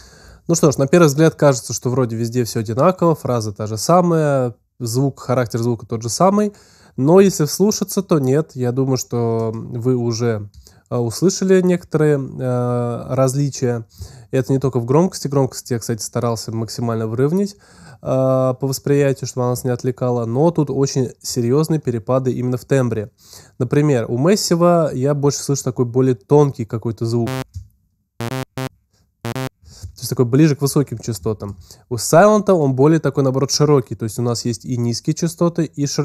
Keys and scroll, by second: 27.2 space, 29.5 space.